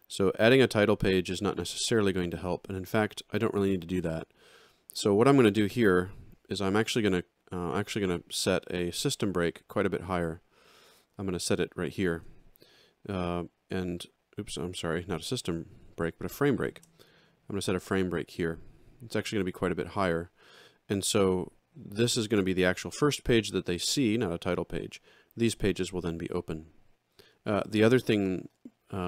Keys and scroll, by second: 12.1 shift+s, 14.8 ctrl+z, 16.7 shift+f.